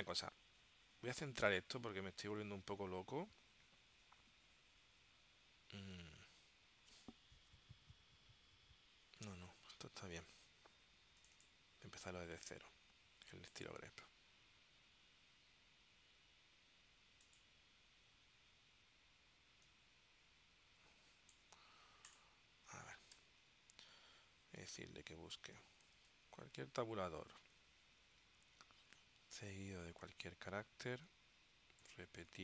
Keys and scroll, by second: 23.3 BackSpace, 25.8 alt+0, 26.5 t, 30.1 ..